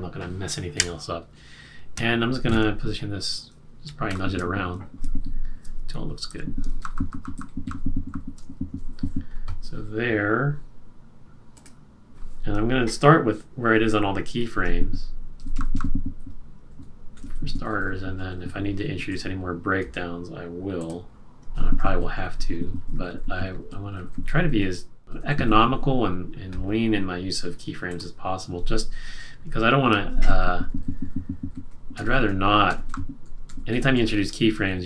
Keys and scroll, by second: 6.7 q, 6.9 Down, 7.0 Down, 8.0 shift+Up, 8.8 shift+Right, 15.3 shift+Left, 15.5 shift+Left, 15.7 shift+Left, 16.1 shift+Up, 16.7 shift+Right, 17.1 shift+Up, 17.5 Left, 17.6 Left, 17.8 Left, 17.9 Left, 18.3 Left, 18.5 Down, 19.0 Down, 21.7 shift+Down, 21.9 shift+Left, 22.1 shift+Left, 22.5 shift+Left, 22.6 shift+Left, 23.1 shift+Left, 23.7 shift+Left, 24.2 shift+Left, 24.4 Down, 25.0 Right, 25.0 Left, 25.1 Left, 25.2 Up, 25.4 Up, 25.9 Up, 30.2 shift+Left, 30.3 shift+Left, 30.5 shift+Left, 30.7 shift+Left, 31.9 Left, 32.6 Down, 33.2 Down, 33.6 Left, 34.2 Left.